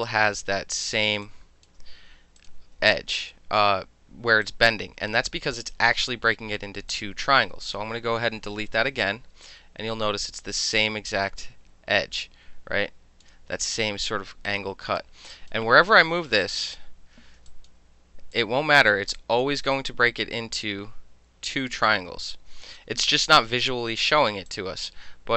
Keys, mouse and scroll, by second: 0.5 ctrl+z, 1.2-1.6 alt+drag, 2.4 click, 2.9-3.3 alt+drag, 4.4-6.6 alt+drag, 6.6 alt+middle click, 6.9-7.2 alt+drag, 7.6 click, 8.6 Delete, 9.4-13.2 alt+drag, 13.2-14.5 alt+middle drag, 14.5-15.0 drag, 15.0-15.3 middle drag, 15.3 drag, 15.5-16.3 middle drag, 16.4-16.8 drag, 17.5 alt+click, 18.3-18.9 drag, 18.9 alt+middle drag, 19.2 alt+drag, 19.4-19.7 alt+middle drag, 19.7-22.8 alt+drag, 24.5 alt+click.